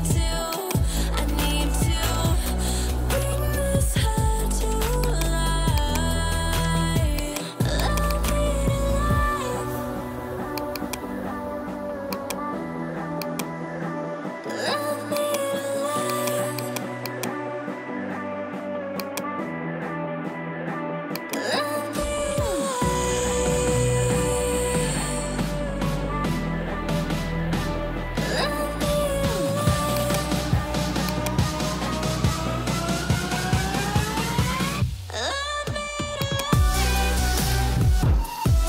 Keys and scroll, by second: 2.8 ], 9.3 ], 20.0 [.